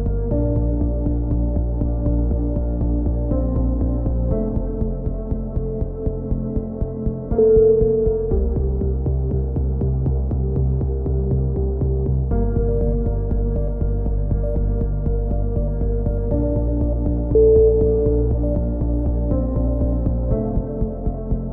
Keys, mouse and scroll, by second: 0.4 Tab, 0.8 click, 1.8 middle click, 2.5 KP_3, 2.8 z, 3.4 middle click, 3.7 click, 4.3 click, 5.0-6.6 middle drag, 6.6 Tab, 6.9 click, 7.2 middle click, 7.3 z, 7.9 z, 8.5 z, 9.0 z, 9.3 click, 14.7-18.6 middle drag, 20.8 middle click, 21.3-21.5 drag.